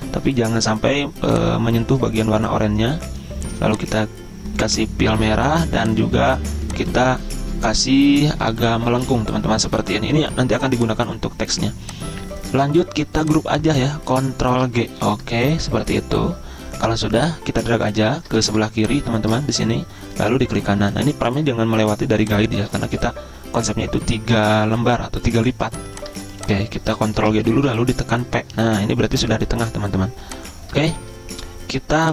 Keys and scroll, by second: 15.0 ctrl+g, 18.5 ctrl+z, 27.2 ctrl+g, 28.2 typing.